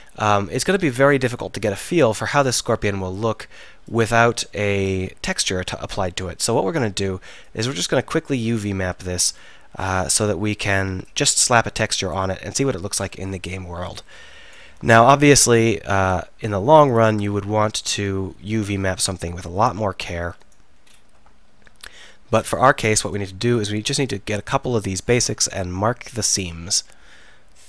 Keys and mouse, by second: 4.7-9.1 middle drag, 14.3-16.7 middle drag, 17.3 Tab, 23.1-26.5 middle drag, 26.9 middle click.